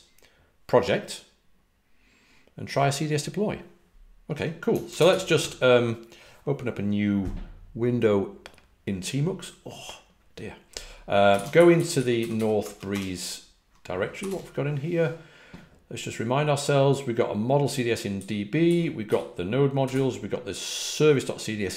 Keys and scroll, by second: 11.0-14.6 typing, 17.9-19.8 typing.